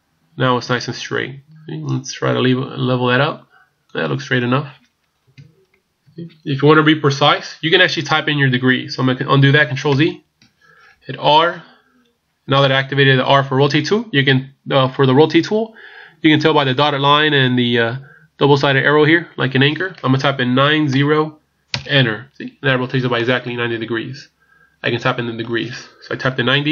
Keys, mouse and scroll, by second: 5.3 KP_1, 6.0 KP_3, 10.0 ctrl+z, 11.3 r, 23.2 middle click, 26.5 KP_1.